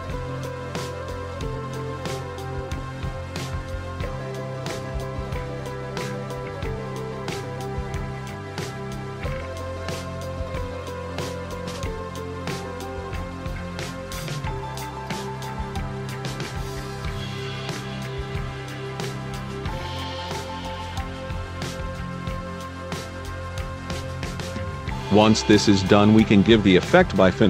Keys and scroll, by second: 7.7 ctrl+t.